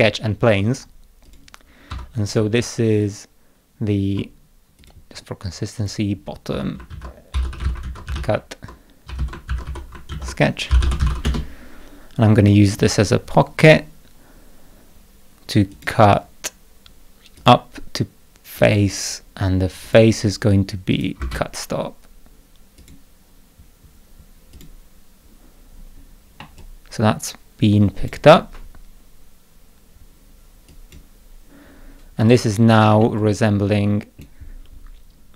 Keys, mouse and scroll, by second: 1.2 click, 1.9 F2, 4.8 click, 5.1 scroll down 2, 5.7 click, 6.5 F2, 6.6-11.5 typing, 15.7 click, 17.3 click, 18.5 click, 19.8 click, 20.9 click, 21.2 space, 22.8 click, 24.5 click, 26.4-28.0 middle drag, 26.6-28.0 drag, 30.7 click, 32.2 click, 33.0-34.2 middle drag, 33.2-34.2 drag.